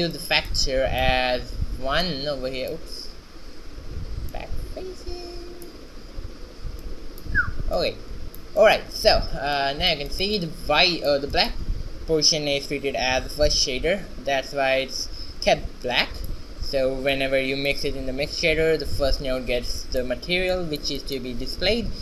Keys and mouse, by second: 0.6-3.9 drag, 4.4-6.1 drag, 6.9-9.5 drag, 9.5 shift+z, 10.6 middle click, 16.1-17.2 middle drag, 17.2-19.0 drag, 19.9-22.0 middle drag.